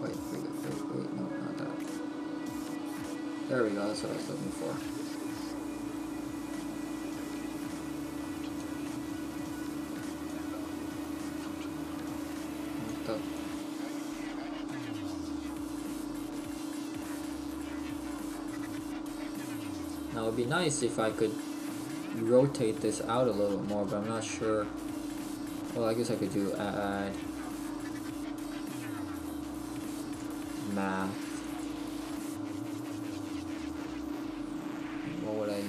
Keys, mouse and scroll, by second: 2.5 scroll down 1, 4.6 middle click, 9.0 click, 13.3 click, 14.7 middle click, 17.8-18.7 scroll up 1, 19.5-19.9 scroll up 1, 31.6 click.